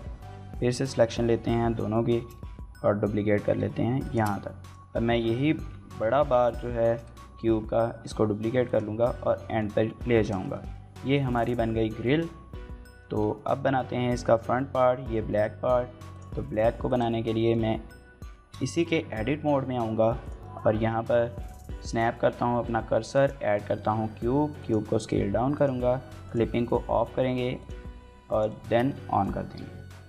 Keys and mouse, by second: 1.2 l, 1.9 shift+d, 2.2 z, 3.8 shift+click, 6.0 shift+click, 6.6 shift+d, 6.8 z, 8.5 click, 9.2 click, 9.6 Tab, 10.3 shift+middle click, 10.5-11.5 middle drag, 12.1-12.8 middle drag, 13.1 shift+middle click, 13.4 middle drag, 14.9 shift+middle drag, 15.1 middle drag, 15.9 click, 16.4 middle click, 16.7 click, 17.2 middle click, 17.5 Tab, 18.4 shift+middle click, 18.7 middle click, 20.8 shift+s, 21.7 middle click, 22.3 shift+a, 23.4 middle click, 24.4 click, 24.7 s, 25.3 click, 26.0 click, 27.4 click, 28.1 click, 28.4 shift+middle click, 29.3 x, 30.0 right click.